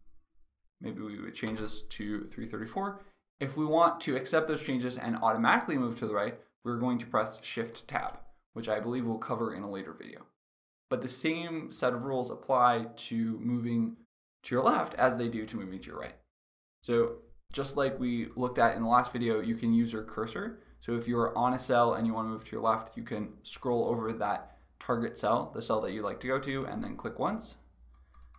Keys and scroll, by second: 1.1 BackSpace, 7.3 shift+Tab.